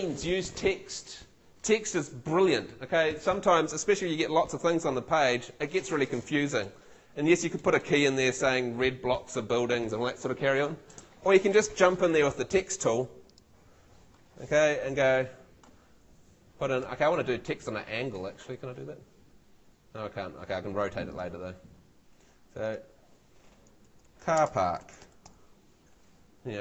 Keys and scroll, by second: 23.6-25.7 typing.